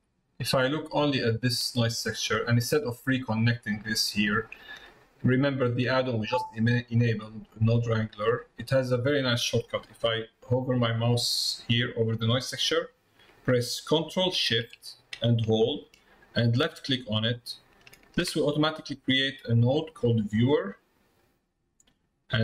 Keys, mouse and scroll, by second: 1.6 click, 5.5 middle click, 7.0 middle click, 16.6 ctrl+shift+click, 20.7 click, 21.2 click.